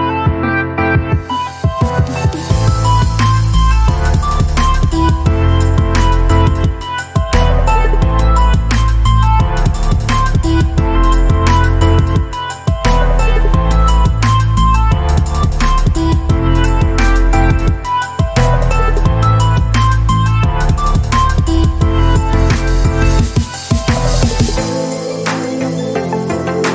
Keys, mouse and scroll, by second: 2.4 click, 2.4 typing, 7.3 alt+click, 13.1-17.3 drag, 18.5-20.0 alt+shift+drag, 20.0 shift+space, 20.1-20.7 click, 20.5 space, 22.2-23.5 drag, 24.1 typing, 24.4-25.6 alt+shift+drag.